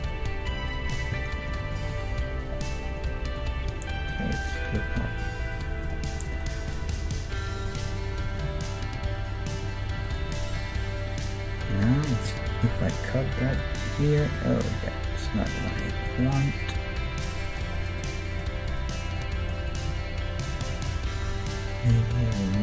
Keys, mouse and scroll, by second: 0.8 middle click, 1.1 ctrl+Tab, 1.9-6.5 right drag, 1.9 g, 3.5 g, 5.0-6.3 middle drag, 5.3 g, 6.3 click, 6.5-8.3 middle drag, 6.9-10.0 right drag, 6.9 g, 8.5 g, 9.8-12.6 middle drag, 12.8 ctrl+e, 13.6 ctrl+r, 15.5-17.5 right drag, 17.5-19.7 middle drag, 19.7-21.5 right drag, 20.0 g, 21.5-22.6 middle drag, 21.9 k.